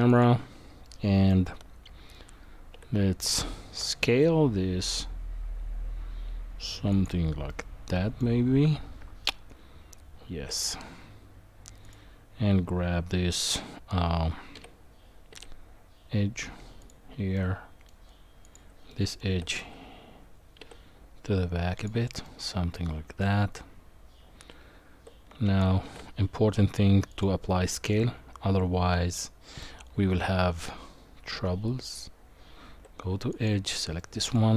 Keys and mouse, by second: 0.1 click, 0.8-1.3 middle drag, 2.8 s, 7.5-8.2 middle drag, 8.6 Tab, 14.5 g, 17.3 middle click, 18.9 middle click, 19.3 g, 22.3 middle click, 24.4 Tab, 25.8 ctrl+a, 28.0 Tab, 33.3 click, 34.0 middle click.